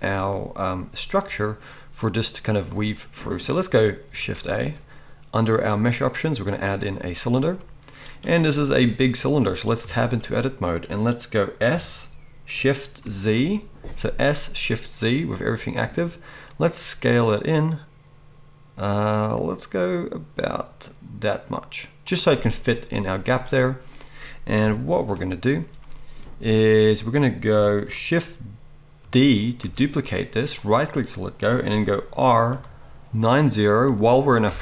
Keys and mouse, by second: 4.2 shift+a, 9.8 Tab, 11.7 s, 14.7-22.2 middle drag, 22.2-29.6 right drag, 24.6 KP_1, 29.6-30.7 shift+drag, 29.6 shift+d, 30.7-34.6 middle drag, 32.5 r.